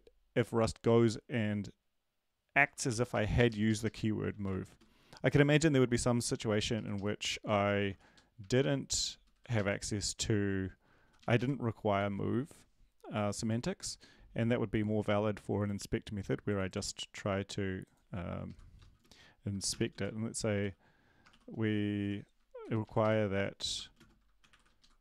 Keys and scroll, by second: 3.1 Down, 3.1 Up, 3.1 Right, 3.3 Up, 3.5 Left, 3.6 Left, 3.8 Left, 4.0-5.0 typing, 7.9 Down, 7.9 Left, 7.9 typing, 8.4 Right, 8.9 Down, 8.9 Right, 9.1 Down, 9.3 Down, 9.5 Up, 11.9 Up, 11.9 ctrl+s, 19.7-20.4 typing, 21.8-22.5 typing, 23.0 Down, 23.0 Right, 23.9-25.0 typing, 24.8 Left.